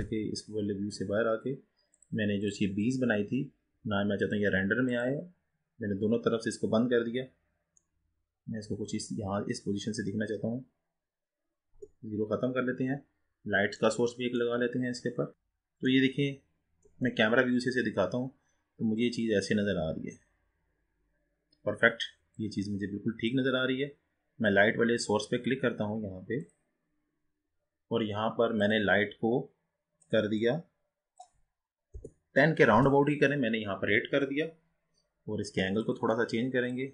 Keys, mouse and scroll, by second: 0.0 n, 2.5 click, 4.6 click, 7.2-8.0 scroll down 2, 8.0-9.8 middle drag, 9.8 scroll up 2, 10.5-10.8 scroll down 2, 11.9 KP_0, 13.2-13.9 scroll down 6, 14.0-15.3 middle drag, 15.3-17.0 scroll down 3, 17.0 KP_0, 19.2-20.0 scroll up 1, 20.0-21.0 scroll up 3, 21.0-22.6 scroll down 2, 22.6-25.8 drag, 27.1 click, 28.8 click, 30.3-33.4 drag.